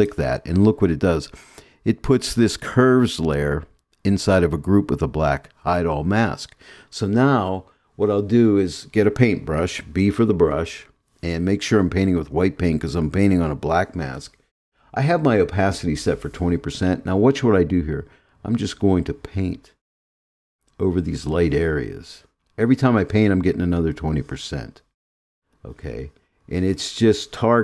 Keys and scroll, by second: 10.2 b.